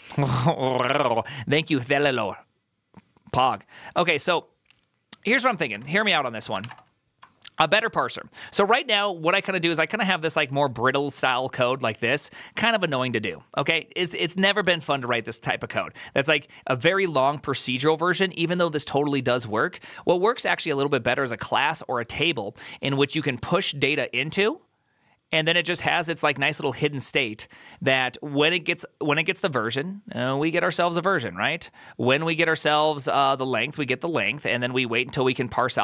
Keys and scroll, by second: 6.5 alt+=, 6.5 ctrl+n, 6.5 Return, 10.0 alt++, 10.3 alt+{, 12.7 alt+{, 14.9 alt+=.